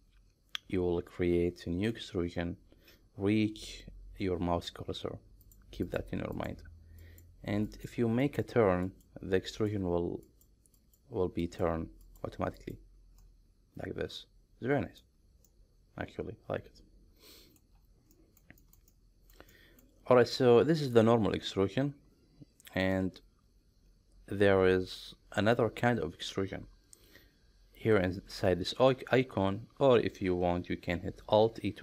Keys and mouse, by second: 0.0-2.0 middle drag, 5.9 ctrl+right click, 7.0 ctrl+right click, 7.8 ctrl+right click, 8.4 ctrl+right click, 9.0 ctrl+right click, 9.5 ctrl+right click, 10.3 ctrl+right click, 10.8 ctrl+right click, 11.5 ctrl+right click, 12.0 ctrl+right click, 12.6 ctrl+right click, 13.2-15.1 middle drag, 15.5-17.6 middle drag, 18.2 middle click, 18.6 shift+middle click, 19.0 middle click, 19.5 middle click, 20.4 middle click, 23.0-25.6 middle drag, 31.4 alt+e.